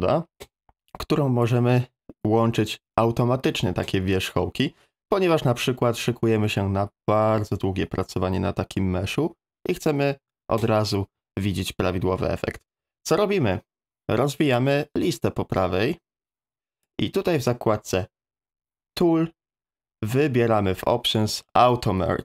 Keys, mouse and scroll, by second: 15.1-16.9 drag.